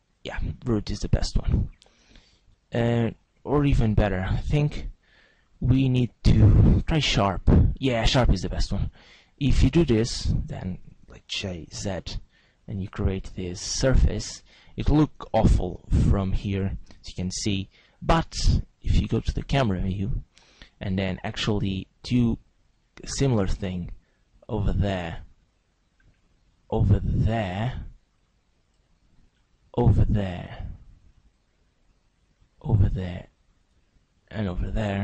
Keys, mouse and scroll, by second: 4.2 right click, 5.3 click, 7.1 g, 11.4 g, 14.0 click, 15.2 z, 15.8 middle click, 16.3 z, 17.2 Tab, 17.5 middle click, 19.8 click, 21.8 Tab, 21.8 right click, 23.0 click, 25.8 right click, 26.6 right click, 27.2 click, 29.3 right click, 29.9 click, 32.0 right click, 32.7 click, 34.4 right click.